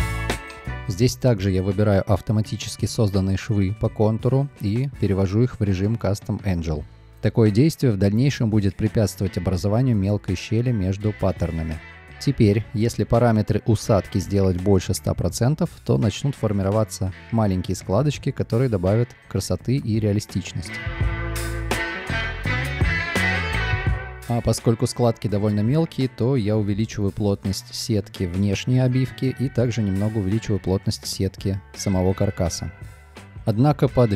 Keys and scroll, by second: 1.9 b, 6.5 2, 7.3 Return, 8.3 a, 17.3 Return, 18.7 space, 20.4 space, 25.2 space, 33.9 space.